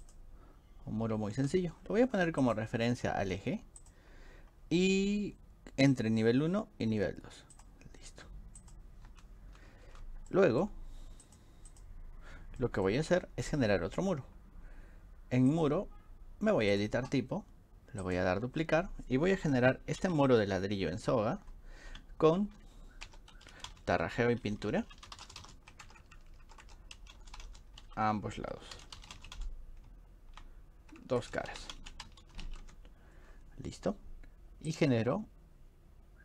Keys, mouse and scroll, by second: 0.1 click, 2.4 click, 3.8 click, 7.6 click, 8.6 click, 10.0-10.6 drag, 10.0 d, 11.2 click, 11.7 click, 12.6 middle click, 12.6 scroll up 2, 15.5 click, 16.7 click, 18.0 click, 20.0 Right, 23.1-29.8 typing, 26.2 click, 26.3 click, 31.0 click, 31.2-32.9 typing, 31.2 click, 34.7 click.